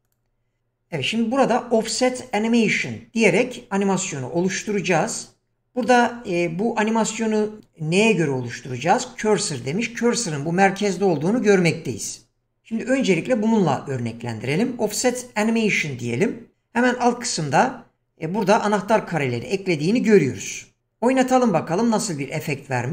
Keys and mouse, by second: 0.1 click.